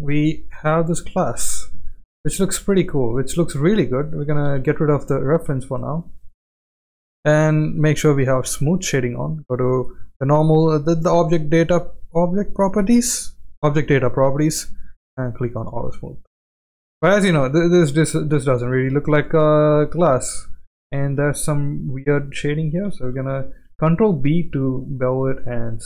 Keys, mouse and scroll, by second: 0.1 shift+middle click, 0.9 click, 1.3 click, 1.8 shift+middle drag, 2.4 right click, 4.4 x, 5.1-5.7 middle drag, 6.0 shift+middle drag, 6.4 click, 8.5 click, 14.3 click, 15.2 click, 16.2-16.6 shift+middle drag, 17.0-18.3 middle drag, 18.5-18.9 middle drag, 19.2-19.6 shift+middle drag, 20.6 click, 21.1 Tab, 23.5 ctrl+b, 25.2 Tab.